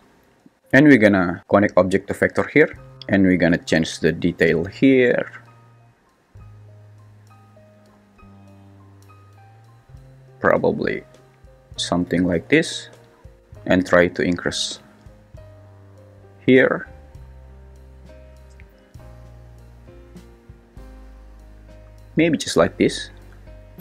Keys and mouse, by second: 1.4 click, 1.6 click, 4.3-11.2 drag, 14.2-22.2 drag.